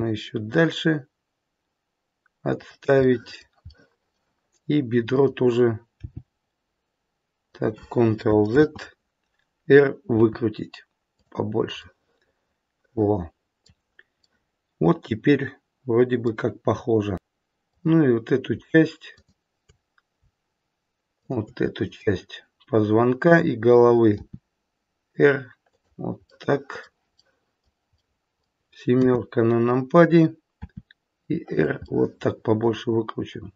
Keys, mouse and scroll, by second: 3.0 middle click, 3.7 middle click, 5.0 click, 6.0 g, 8.5 ctrl+z, 10.2 r, 11.8 middle click, 14.3 middle click, 15.3 middle click, 17.6 click, 19.0 shift+click, 21.1 shift+click, 24.0 r, 26.3 middle click, 27.2 middle click, 27.8 scroll up 1, 28.0 middle click, 28.9 KP_7, 30.6 r, 31.8 middle click.